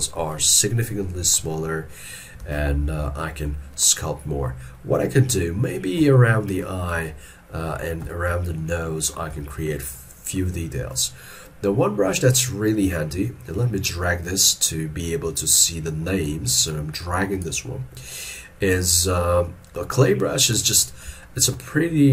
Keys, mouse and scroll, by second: 0.4 ctrl+middle click, 2.5 alt+e, 3.5 middle click, 6.2 shift+middle click, 7.1 ctrl+middle click, 8.2 shift+middle click, 9.5 shift+middle click, 18.1-21.1 scroll up 1, 21.3 shift+middle click.